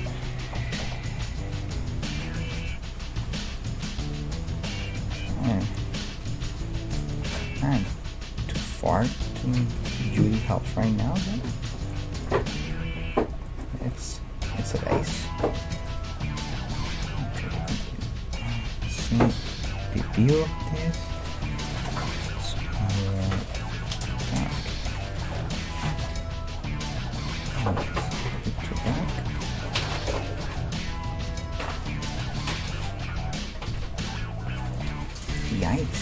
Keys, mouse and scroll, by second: 1.1 right click, 1.3 g, 5.0-9.5 middle drag, 6.4-8.5 right drag, 7.2 g, 9.6 g, 10.5-12.3 right drag, 10.7 g, 12.4-14.5 right drag, 12.8 g, 13.6-22.8 middle drag, 16.8 KP_3, 21.8-24.1 right drag, 22.7 g, 24.4-26.9 right drag, 26.1 g, 27.6-30.6 right drag, 29.1 g, 31.3 Tab, 31.7-33.4 right drag, 32.1-34.2 middle drag, 35.3 KP_1, 35.8-36.0 middle drag.